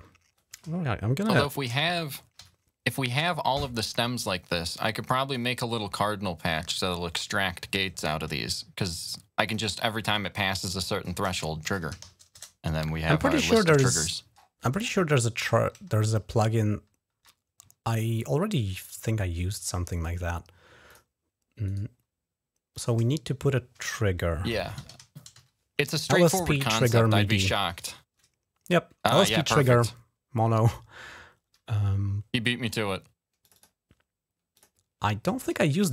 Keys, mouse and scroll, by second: 2.1 ctrl+shift+n, 3.6 click, 4.0 click, 4.5 click, 5.1 click, 9.2 click, 10.6 click, 11.2-13.3 typing, 14.1 scroll down 1, 14.6-15.1 scroll up 2, 15.3 ctrl+Up, 16.3 ctrl+Up, 17.4 ctrl+Down, 18.7 Down, 20.6 click, 21.4 right click, 22.5 click, 24.2-25.6 typing, 30.4 click, 33.2 click, 33.3 click, 34.3 click.